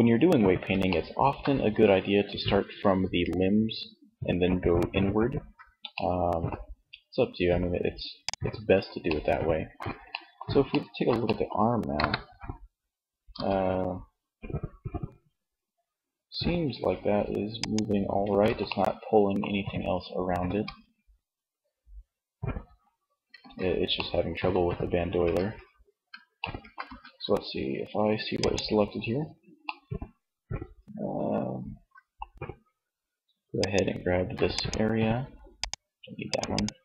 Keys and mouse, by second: 7.4-9.3 middle drag, 11.1 KP_1, 12.3 r, 17.2-18.8 drag, 17.6 ctrl+z, 19.6 r, 22.3-23.7 ctrl+drag, 22.5 ctrl+z, 24.4 Tab, 26.1 a, 28.6 middle click, 30.2-31.7 middle drag.